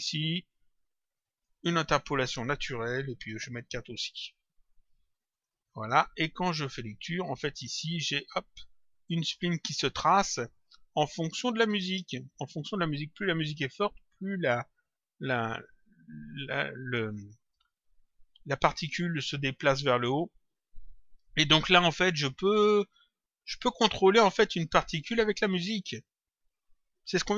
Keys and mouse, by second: 1.2 click, 3.7 click, 5.2 click, 7.1 click, 12.3 click, 20.0 click, 23.5 click, 24.8 click, 27.1 click.